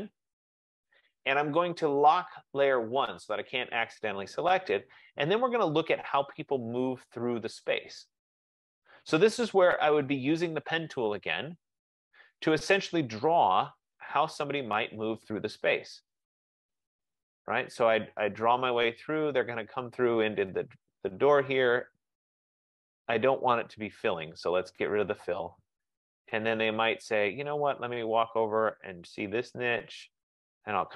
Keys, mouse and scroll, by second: 0.0 click, 2.5 click, 3.6 click, 4.3 click, 11.3 click, 14.8 click, 17.5 click, 19.5 click, 21.1 click, 24.5 click, 27.7 click, 29.8 click.